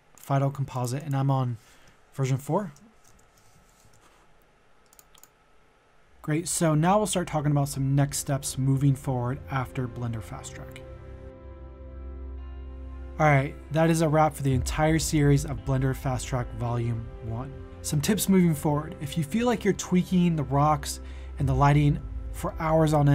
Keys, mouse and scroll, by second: 0.7 click, 2.2 shift+Right, 2.4-3.8 typing, 3.5 ctrl+a, 4.9 click, 6.7 click.